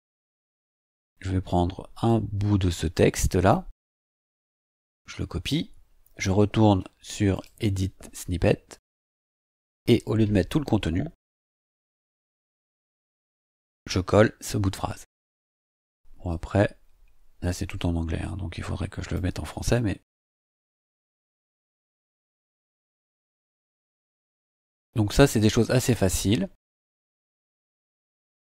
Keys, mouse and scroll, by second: 2.0-3.7 drag, 4.6 ctrl+c, 7.3 click, 9.5 click, 11.2 BackSpace, 12.4 BackSpace, 13.1 ctrl+v, 14.1-14.4 scroll down 2, 16.3-19.3 drag, 19.9 BackSpace, 21.3 shift+;, 24.4 scroll down 2, 25.2 scroll up 2, 25.8 scroll up 1, 26.7 scroll down 2.